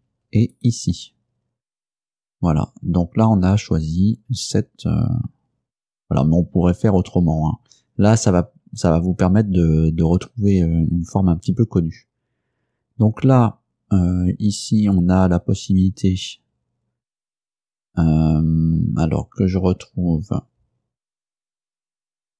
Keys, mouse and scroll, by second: 0.6 shift+middle click.